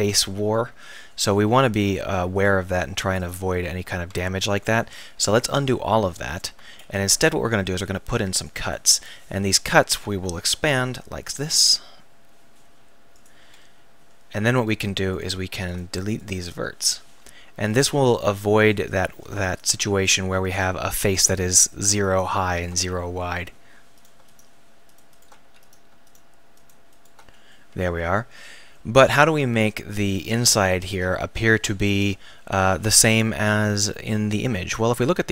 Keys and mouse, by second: 4.5 ctrl+z, 4.8-5.5 ctrl+z, 6.0 ctrl+z, 7.1 ctrl+r, 8.7-10.3 drag, 9.9 s, 13.3 click, 14.7-16.4 drag, 14.7-16.4 middle drag, 14.7-18.9 right drag, 16.4 x, 19.8-23.4 right drag, 19.8 f, 22.8 f, 25.0 shift+right click, 25.4 f, 27.3 f.